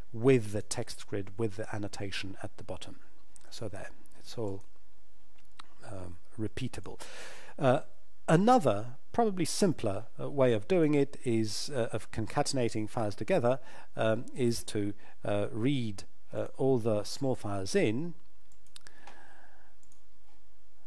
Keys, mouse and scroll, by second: 0.5 click, 4.4 click, 10.7 click, 14.4 click, 15.8-16.4 scroll down 1, 16.4 click, 17.0 scroll down 1.